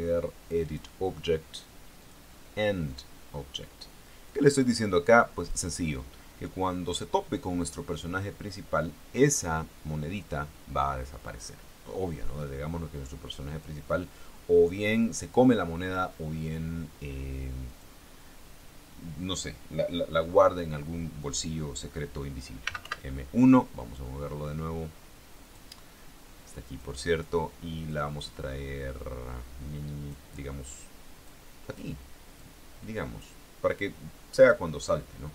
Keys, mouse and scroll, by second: 0.8 click, 2.2 click, 3.1 click, 4.5-5.9 drag, 13.7 click, 15.3-15.6 scroll down 1, 16.0-16.3 scroll up 1, 16.5 scroll down 1, 17.8 click, 22.8 m, 23.0 1, 25.6 click, 27.0 click, 28.1-30.5 drag, 31.4 click, 32.5 click.